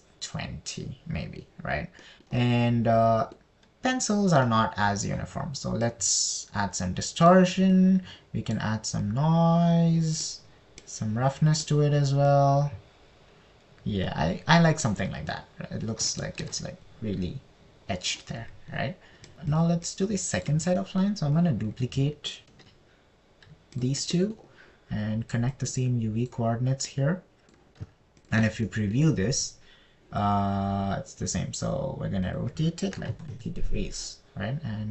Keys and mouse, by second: 0.0 click, 3.4 middle click, 7.3 click, 7.5-8.8 right drag, 9.1 right click, 9.3 click, 10.5 right click, 10.9 click, 12.3 click, 13.9-16.3 drag, 17.6 shift+middle click, 19.9 click, 20.9 drag, 21.3 click, 22.2 middle click, 22.8 click, 23.9 shift+d, 25.2 click, 26.9 drag, 29.6 ctrl+shift+click, 30.1 click, 30.1 middle click, 30.1 right click, 33.7-34.7 drag.